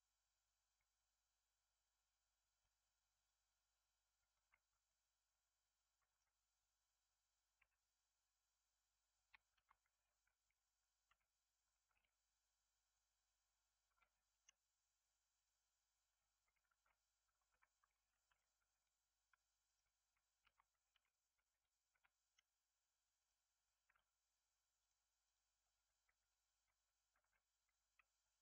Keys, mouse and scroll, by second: 2.3 scroll down 1, 2.5-7.5 middle drag, 7.5 Tab, 9.5 shift+d, 15.3-16.6 drag, 16.6 ctrl+z, 17.3 ctrl+z, 18.2 r, 20.4 shift+d, 23.1 click, 23.8 g, 25.2 click, 25.6 Tab, 27.1 g.